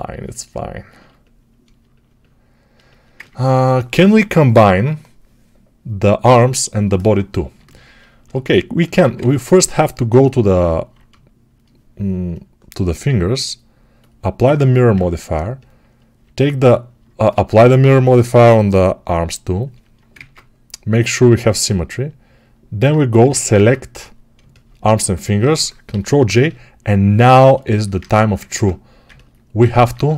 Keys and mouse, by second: 0.1-10.0 alt+right drag, 2.6 alt+shift+click, 9.0 ctrl+Tab, 10.0-14.8 alt+shift+middle drag, 14.8 right click, 15.7-19.9 middle drag, 19.9-21.8 ctrl+drag, 20.0 ctrl+Tab, 21.8-30.1 alt+middle drag, 23.0 alt+q, 23.4 ctrl+Tab.